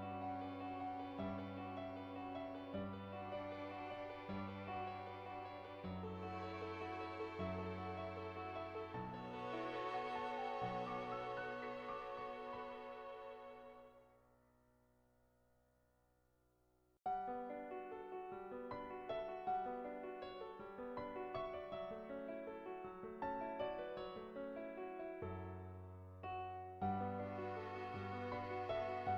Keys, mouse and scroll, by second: 5.3 middle click, 6.5 Tab, 7.3 middle click, 8.2 middle click, 9.4 shift+middle click, 9.6 middle click, 10.2 middle click, 11.2 shift+a, 14.7 Tab, 16.1 middle click, 17.0 middle click, 17.4 middle click, 18.7 shift+middle click, 19.0 middle click, 23.8-25.9 drag, 26.6 middle click, 28.9-29.1 drag.